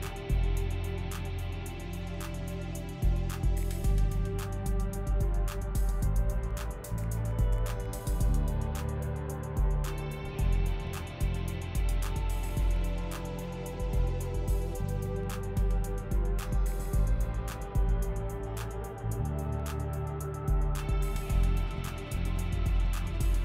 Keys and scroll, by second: 5.8 f, 8.0 l.